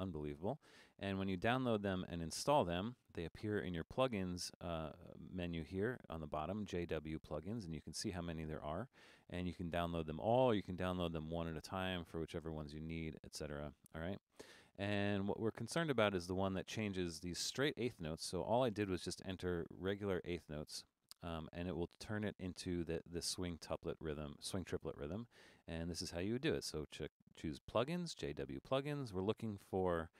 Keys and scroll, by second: 13.2 typing.